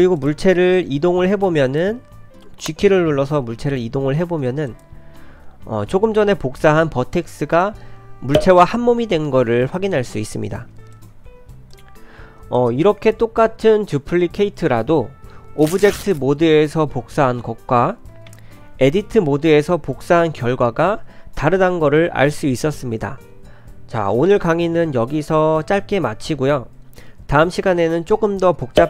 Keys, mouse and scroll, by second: 0.2 click, 1.1 g, 1.6 click, 3.1 g, 10.6 g, 11.1 g, 11.7 Tab, 11.7 click, 12.6 click, 18.3 Tab.